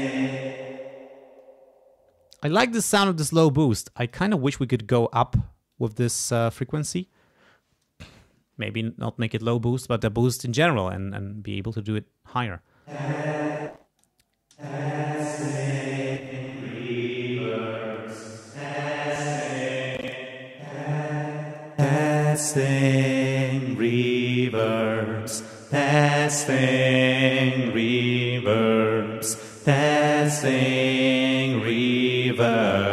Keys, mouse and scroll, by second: 0.2 space, 3.7 click, 5.7 click, 12.8 space, 13.6 click, 14.5 space, 16.1 click, 17.5 click, 18.4-19.6 scroll up 2, 19.8 space, 20.0-20.4 scroll up 1, 20.5 space, 21.4-22.5 scroll up 2, 21.8 space, 23.0-23.6 scroll up 1, 28.7 click, 29.8 click, 31.2 click, 32.2 click.